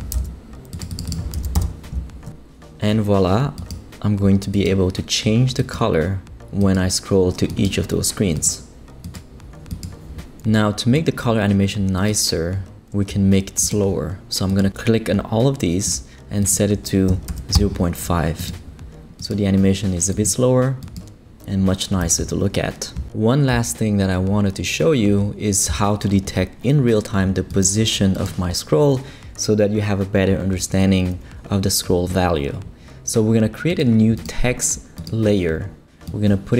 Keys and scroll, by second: 0.1 super+c, 1.3 super+v, 1.5 super+Return, 1.5 typing, 1.9 shift+super+Left, 5.3 typing, 17.1 BackSpace, 17.3 5, 17.5 Return.